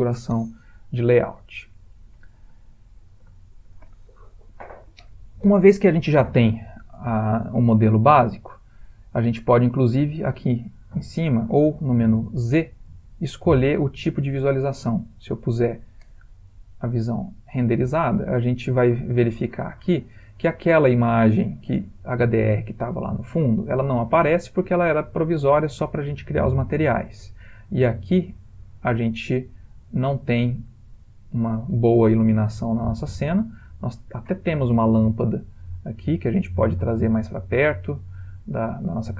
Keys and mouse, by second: 0.7 ctrl+middle click, 1.5 middle click, 2.8 ctrl+middle click, 3.4 shift+middle click, 12.0 z, 16.3 middle click, 16.5 middle click, 18.1 ctrl+middle click, 18.2 ctrl+middle click, 19.1 shift+middle click, 19.8 ctrl+middle click, 19.9 ctrl+middle click, 22.3 middle click, 22.5 middle click, 23.3 ctrl+middle click, 23.4 ctrl+middle click, 23.9 middle click, 24.0 middle click, 29.1 ctrl+middle click, 29.3 ctrl+middle click, 29.6 ctrl+middle click, 30.1 middle click, 30.9 ctrl+middle click, 31.9 ctrl+middle click, 32.2 ctrl+middle click, 32.5 middle click, 32.9 ctrl+middle click, 33.0 ctrl+middle click, 34.0 click, 34.7 middle click, 34.8 middle click, 35.7 g, 37.2 ctrl+middle click, 37.2 ctrl+middle click, 37.5 middle click, 38.4 middle click, 38.7 middle click, 39.0 g.